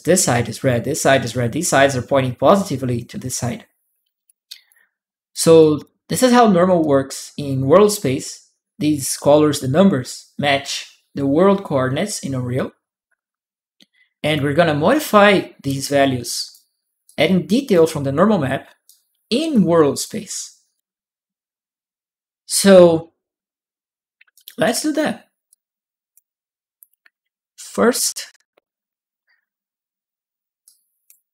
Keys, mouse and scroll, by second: 4.0 click, 4.0-5.6 right drag, 6.6 click, 6.6-7.6 right drag, 14.0 click, 15.6 click, 16.8 click, 18.6-20.5 right drag, 19.3 click, 24.1 right click, 25.3 click, 30.4 click.